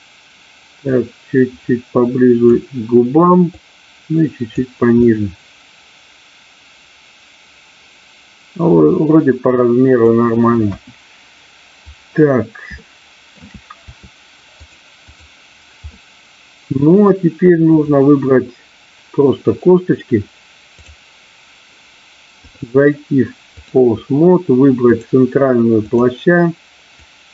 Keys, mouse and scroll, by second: 0.9-2.5 drag, 3.6 click, 5.0-10.0 middle drag, 10.0-10.6 scroll down 1, 10.6 KP_1, 12.8 middle click, 14.6 click, 15.8-17.1 middle drag, 22.4-23.6 drag, 25.0 click, 26.9-27.3 drag.